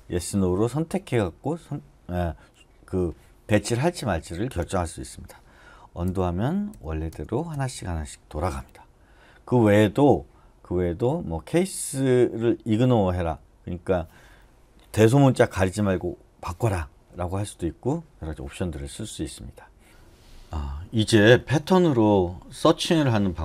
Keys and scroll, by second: 4.6 Escape, 6.0 u, 6.7 u, 7.1 u, 7.5 u.